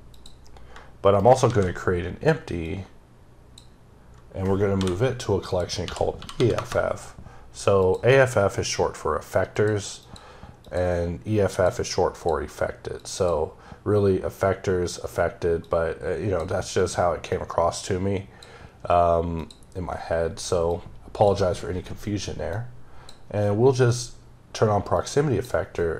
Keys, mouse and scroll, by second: 1.0 shift+right click, 1.3 shift+a, 2.5 click, 3.9-4.3 scroll up 2, 4.6 m, 5.3 click, 5.7 e, 6.4 KP_Enter, 7.6 click, 9.4 click, 9.8 click, 10.5 click, 11.4 click, 12.0 click, 12.8-15.5 click, 16.6 click, 17.2 click, 19.2 click, 20.5 click, 22.4 click, 24.8 click.